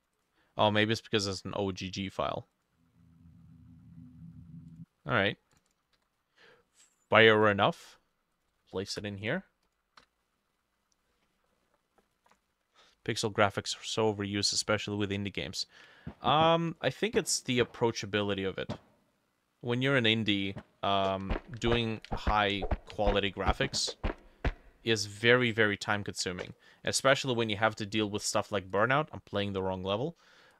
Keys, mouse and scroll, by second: 0.2 double click, 5.7 double click, 6.0 ctrl+c, 8.5 ctrl+v, 8.9 Return, 10.0 F5, 11.6 click.